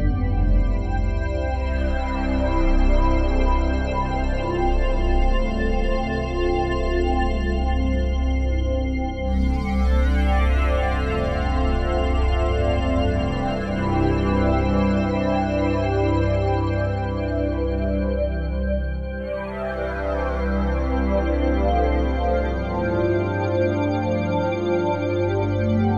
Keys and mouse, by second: 0.5 click, 1.6 shift+s, 3.4 click, 4.8 click, 8.0 click, 8.9-12.4 alt+shift+drag, 13.5 ctrl+s, 14.7-19.0 drag, 20.2 click, 23.3 click, 24.3 click, 25.5 click.